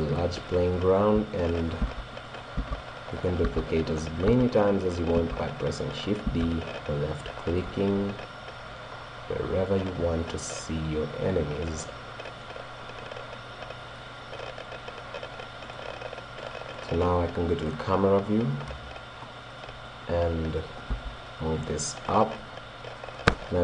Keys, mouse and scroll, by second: 0.6 right click, 1.9-6.3 typing, 2.4 click, 5.8 click, 6.5 click, 8.0-9.0 drag, 8.5 middle click, 9.0 middle click, 9.7 right click, 9.8-12.3 drag, 9.8 middle click, 10.0 right click, 11.8 right click, 12.3-13.3 middle drag, 15.4-18.0 drag, 18.0-19.1 middle drag, 19.0-19.9 scroll up 1, 19.9 middle click, 20.6 right click, 21.0 g, 22.2 click.